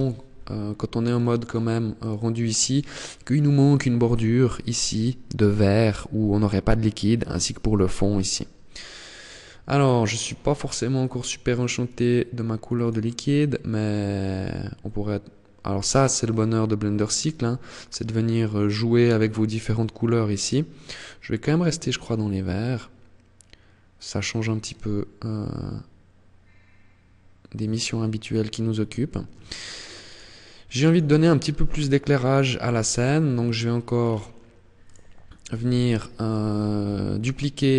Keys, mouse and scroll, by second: 0.4 click, 0.6 click, 8.8 click, 9.6 click, 11.0 click, 11.8 click, 29.7-31.3 click, 32.0-32.3 scroll down 5, 32.4 middle click, 33.2 scroll down 3, 34.1 right click, 36.1 KP_1, 37.2 shift+d.